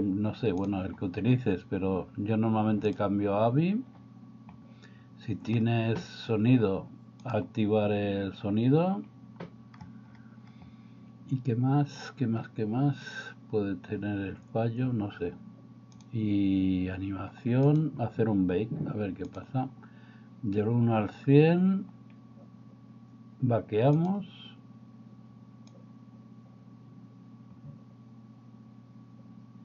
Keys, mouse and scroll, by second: 0.7-3.0 drag, 7.3-9.2 drag, 16.0-24.3 drag, 25.8-29.6 drag.